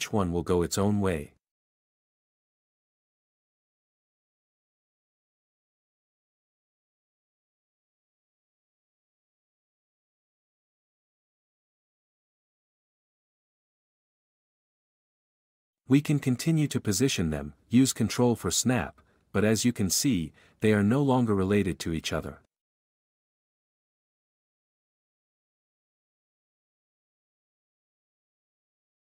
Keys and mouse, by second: 7.1 k, 14.1 g, 24.3 g, 25.2 Escape, 26.2 q, 27.2 b, 28.1 x.